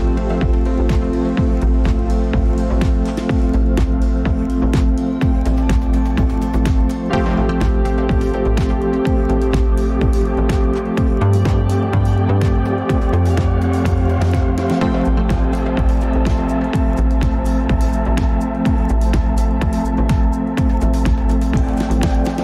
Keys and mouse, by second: 1.6 t, 1.6 r, 10.1-10.4 shift+middle drag, 14.5 s, 19.7-20.2 middle drag, 21.0 Tab, 21.8 click.